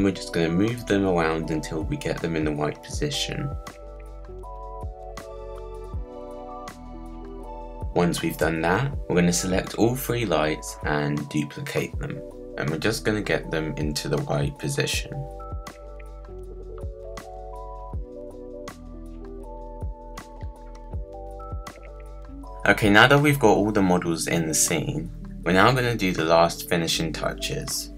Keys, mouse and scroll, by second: 1.6-2.7 drag, 4.1-5.1 drag, 5.2 z, 5.4-8.3 shift+drag, 8.6 click, 9.0 middle click, 9.2 scroll up 2, 9.2 middle click, 9.3 scroll down 1, 9.4 click, 10.3 alt+d, 11.2-11.7 shift+drag, 11.7 alt+d, 13.4 click, 15.4 click, 16.1 click, 16.5 click, 17.5 shift+click, 18.9 click, 20.0 shift+click, 20.7 click, 21.1 shift+drag, 22.2 click.